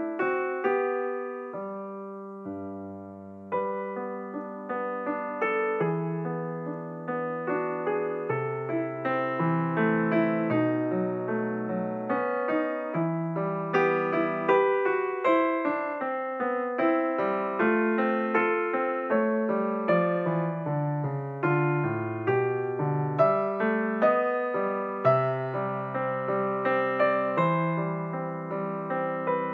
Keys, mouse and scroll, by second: 4.0 KP_7, 5.2-6.8 scroll up 4, 6.8-9.9 drag, 10.1-12.6 scroll down 4, 12.8 s, 16.9 click, 18.0 shift+click, 20.3 ctrl+KP_Subtract, 24.1 click, 25.5 click, 27.6 shift+click.